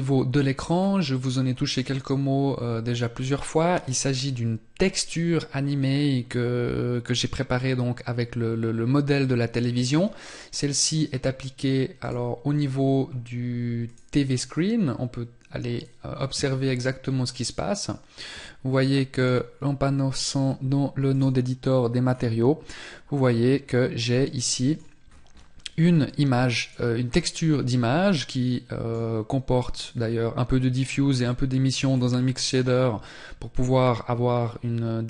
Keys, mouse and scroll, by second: 0.1 scroll up 1, 15.3 scroll down 1, 16.5 click, 21.3 scroll down 3, 23.5 click.